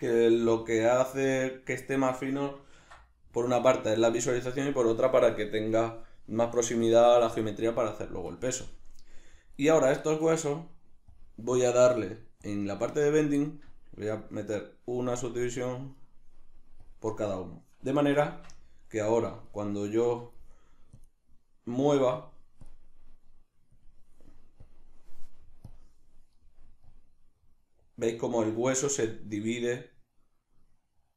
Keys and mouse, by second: 0.3 g, 1.3 click, 1.9 right click, 2.8 ctrl+alt+s, 4.0 click, 9.6 right click, 11.1 drag, 12.4 click, 13.7 click, 14.5 right click, 15.4 click, 16.0 right click, 16.8-19.1 drag, 18.3 Tab, 19.1 right drag, 19.5 shift+right drag, 19.9 shift+right click, 21.0-24.8 drag, 26.9-31.1 drag.